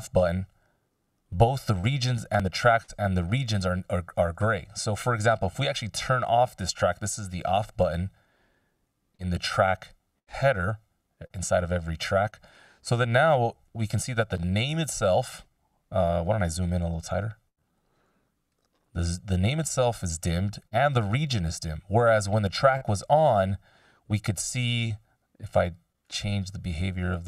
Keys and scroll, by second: 7.4 ctrl+alt+super+m.